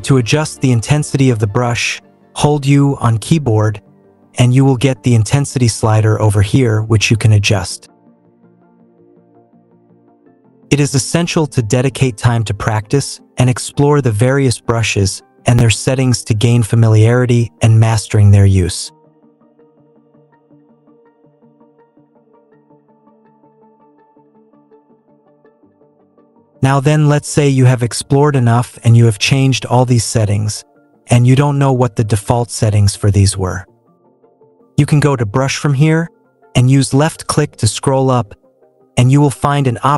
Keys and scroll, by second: 2.7 u.